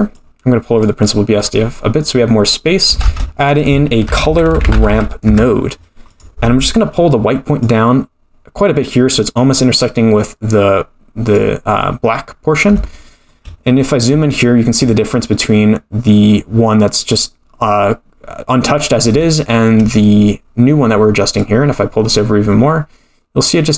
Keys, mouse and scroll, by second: 0.1 click, 1.5-2.2 scroll up 1, 2.2 scroll up 1, 3.0 shift+a, 4.9 r, 6.9-7.6 scroll up 1, 7.6-11.3 drag, 7.6 scroll up 3, 12.5 scroll up 3, 12.8-13.4 shift+middle drag, 13.7-14.8 scroll up 2, 19.2-19.8 shift+middle drag, 21.4-23.7 drag.